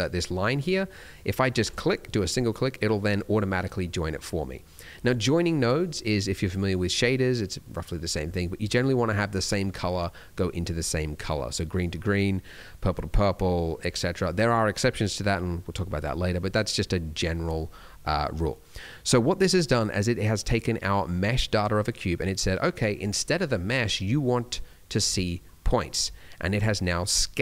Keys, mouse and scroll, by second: 18.0 middle click, 23.9 click, 26.5 click.